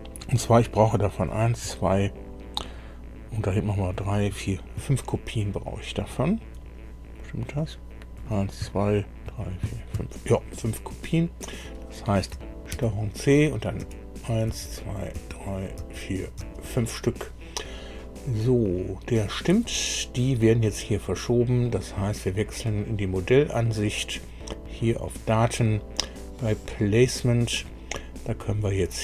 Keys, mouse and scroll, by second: 11.4 click, 12.7 ctrl+c, 13.8 ctrl+v, 15.4 ctrl+v, 15.8 ctrl+v, 16.4 ctrl+v, 18.7 click, 19.6 click, 22.3 click, 27.0 click.